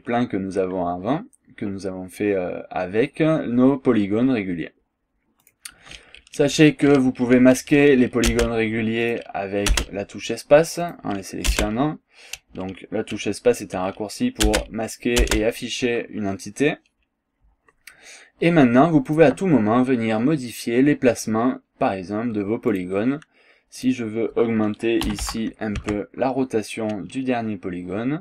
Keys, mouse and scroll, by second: 5.4 click, 8.3 space, 9.0 click, 9.8 space, 10.8 click, 11.5 space, 14.5 space, 15.2 space, 19.1 click, 21.4 scroll down 2, 21.7-22.0 scroll up 2, 22.8 click, 23.8 click, 25.1 KP_2, 25.2 KP_5, 25.8 Tab.